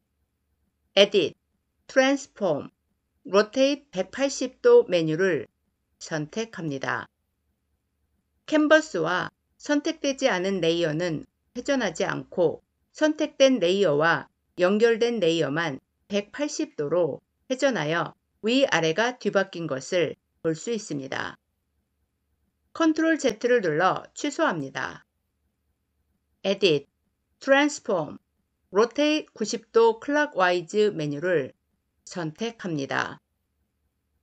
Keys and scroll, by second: 22.6 ctrl+z.